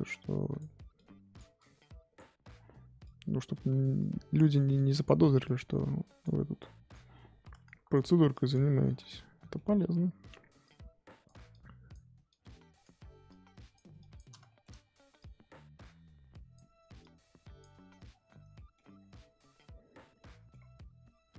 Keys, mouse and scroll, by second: 0.3-8.8 drag, 8.8 scroll down 3, 9.1 middle click, 9.7-10.3 scroll up 4, 10.6-14.4 drag, 14.4 shift+middle click, 14.7-15.1 scroll up 1, 15.1-18.0 drag, 18.0-18.5 scroll down 3, 18.5 middle click, 18.9 scroll down 1, 19.2-20.5 middle drag, 20.5-21.3 scroll up 5.